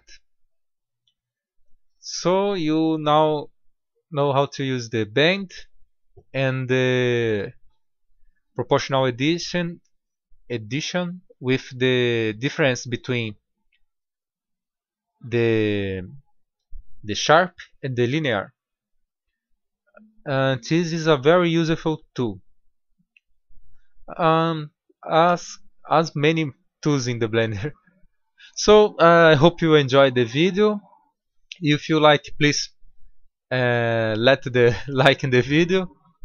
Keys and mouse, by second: 0.9-1.3 middle drag, 3.3 middle click, 3.5-4.0 middle drag, 4.1-4.8 middle drag, 5.0 middle click, 8.2-10.7 middle drag, 14.3-17.8 drag, 20.2-24.2 middle drag, 24.3-34.8 middle drag.